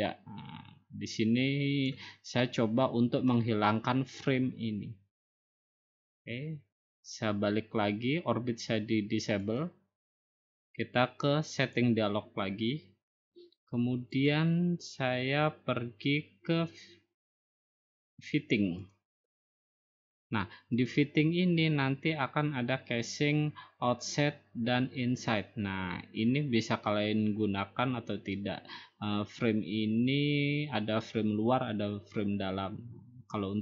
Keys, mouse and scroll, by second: 3.3-4.4 drag, 9.6 click, 11.7-12.8 drag, 14.3 click, 15.6-16.5 scroll down 1, 16.5 scroll down 1, 18.9-20.0 drag, 20.9 click.